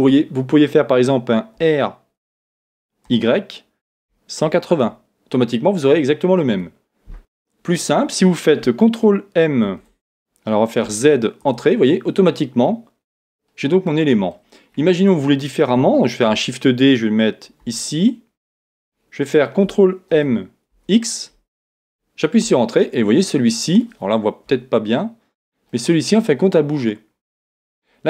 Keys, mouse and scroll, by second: 1.6 r, 9.6 ctrl+m, 12.6-16.3 middle drag, 16.3 shift+d, 19.4 click, 20.1 ctrl+m, 23.2-24.8 middle drag, 24.4 KP_1, 25.2-26.7 scroll down 1, 26.7 middle click.